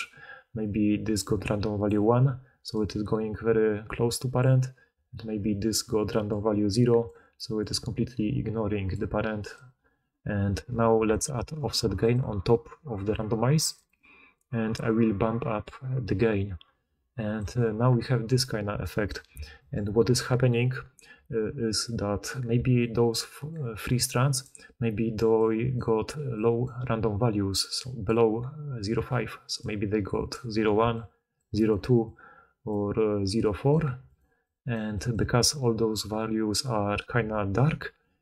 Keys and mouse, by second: 0.0-9.4 typing, 5.6 click, 5.6 middle click, 5.6 right click, 11.0 d, 18.2-19.8 drag, 18.2-19.8 middle drag, 18.2-19.8 right drag, 22.4-35.3 typing, 29.0-31.1 drag, 29.0-31.1 right drag, 38.1-38.2 drag.